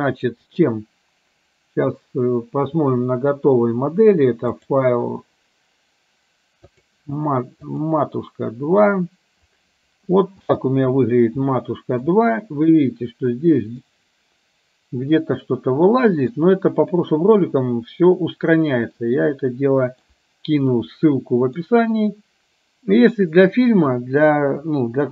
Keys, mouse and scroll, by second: 0.6-4.4 drag, 4.7-8.7 drag, 10.4 space, 12.2-16.8 middle drag.